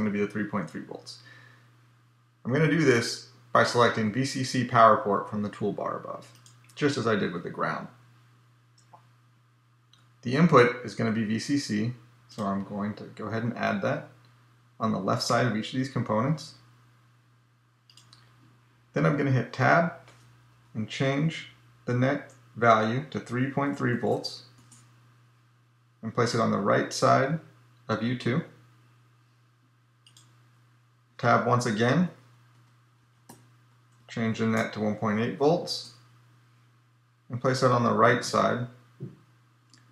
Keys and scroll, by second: 19.5 Tab, 31.0 Tab.